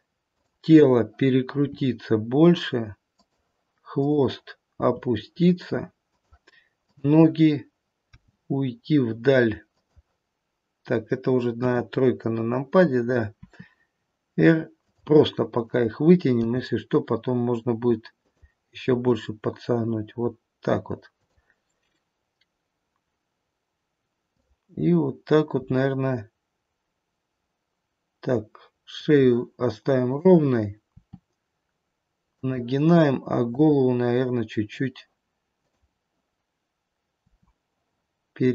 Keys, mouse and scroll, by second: 0.4 click, 1.6 r, 3.8 click, 4.7 r, 6.7 click, 8.1 g, 11.6 KP_3, 13.4 r, 15.7 click, 16.4 g, 19.0 r, 24.2 click, 25.4 r, 30.0 click, 30.9 r, 33.5 click, 35.6 click, 37.2 r.